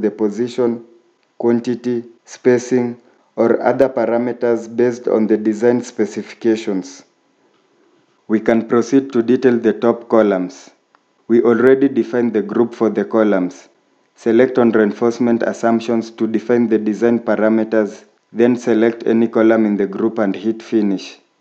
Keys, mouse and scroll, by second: 0.0 middle click, 10.8 scroll up 1.